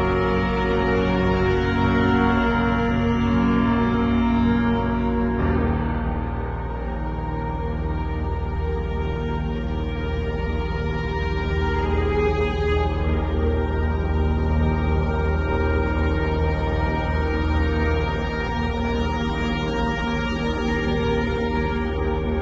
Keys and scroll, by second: 3.3 ], 4.0 [, 6.0 x, 7.1-10.0 typing, 11.5 x, 12.0 [, 13.1 [, 14.1 [, 21.1-22.4 typing.